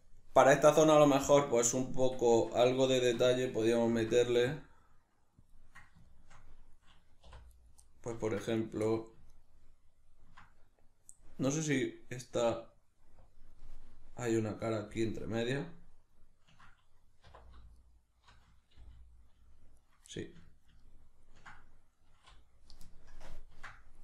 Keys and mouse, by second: 2.4 Tab, 3.9 ctrl+r, 5.5 click, 7.3 3, 7.6 right click, 8.6 right click, 8.9 middle click, 9.4 ctrl+right click, 12.6-13.6 drag, 13.6-17.8 middle drag, 17.3 2, 17.8 alt+right click, 18.8 g, 19.9 right click, 20.2 ctrl+middle click, 23.2 ctrl+KP_Add, 23.2-24.0 middle drag.